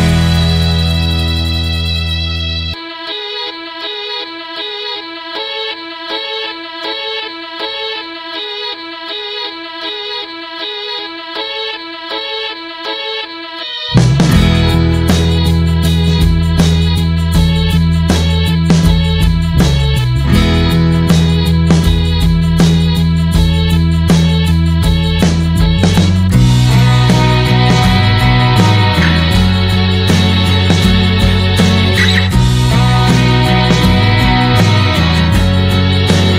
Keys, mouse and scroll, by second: 4.0 n, 4.5 scroll down 1, 4.7-5.7 middle drag, 5.7 scroll down 1, 5.9-7.6 middle drag, 7.6-12.5 drag, 12.5-15.7 middle drag, 15.7-23.5 drag, 23.5 shift+middle click, 24.2 click, 24.5-29.9 middle drag, 29.9-36.3 drag.